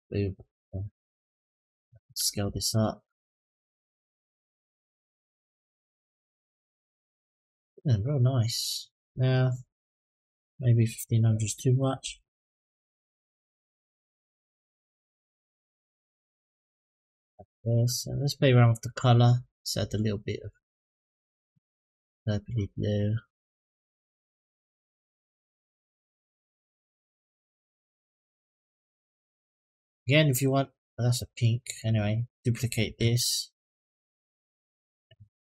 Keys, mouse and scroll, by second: 1.0 click, 2.2 s, 5.9-7.9 drag, 9.7-12.6 drag, 12.3 KP_0, 14.9-16.0 drag, 17.8 click, 30.9 middle click, 31.5 click, 32.8 shift+d, 35.4 click.